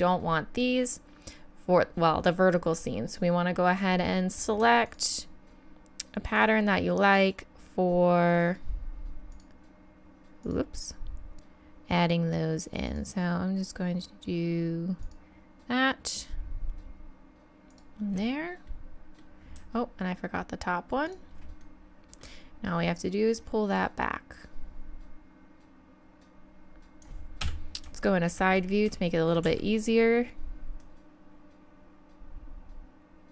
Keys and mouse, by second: 4.9-9.3 drag, 12.5 click, 12.9-14.5 drag, 18.7 middle click, 21.6 middle click, 23.3 middle click, 27.4 KP_3, 29.4 z, 30.8 click, 31.0 click, 32.6 click.